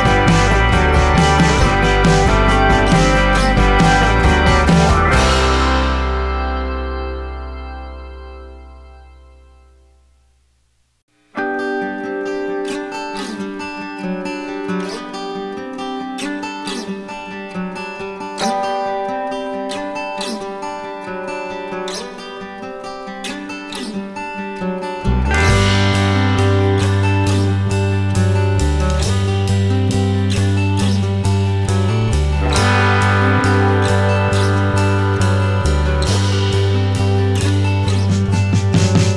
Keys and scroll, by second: 11.2 ctrl+alt+s.